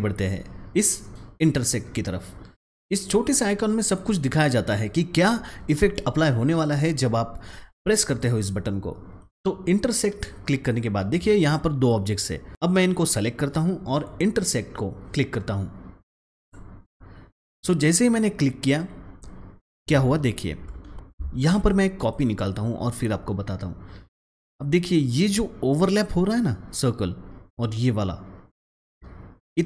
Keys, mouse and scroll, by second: 11.0-16.3 drag, 20.6 click, 20.8 ctrl+z, 21.9 click.